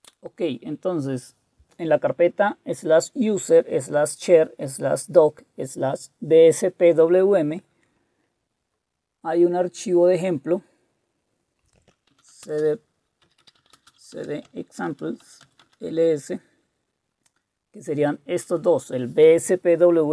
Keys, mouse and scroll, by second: 12.0-15.9 typing.